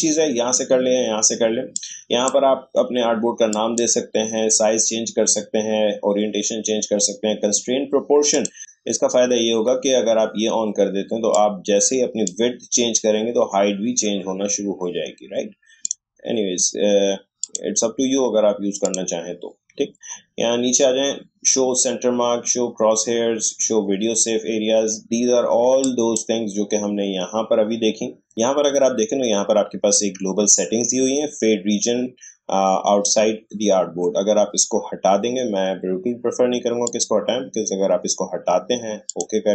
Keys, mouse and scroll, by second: 1.7-3.5 drag, 8.3 click, 11.3-12.7 drag, 12.7 scroll down 1, 13.3-13.8 scroll up 1, 13.8-14.1 scroll down 1, 14.1 scroll up 1, 14.4 scroll down 1, 14.6-15.8 scroll up 1, 15.8 click, 26.1-28.3 drag, 36.8 click.